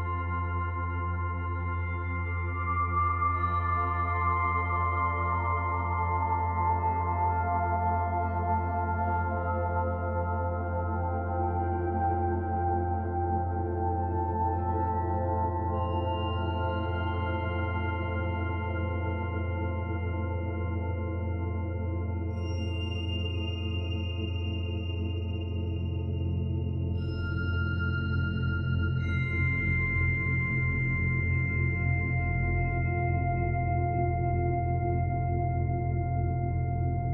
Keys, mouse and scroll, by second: 0.8 middle click, 2.0-2.3 scroll up 4, 2.5 middle click, 3.1 shift+middle click, 3.6 scroll up 3, 4.6 click, 5.5 middle click, 6.2 middle click, 6.9-7.5 scroll down 4, 7.5 middle click, 8.4-8.9 scroll down 3, 8.9 shift+middle click, 10.0 KP_0, 11.2-11.5 scroll down 2, 11.7 shift+middle click, 14.3 click, 15.3 click, 20.8 click, 24.8 click, 26.4 click, 30.0 click, 35.5 click.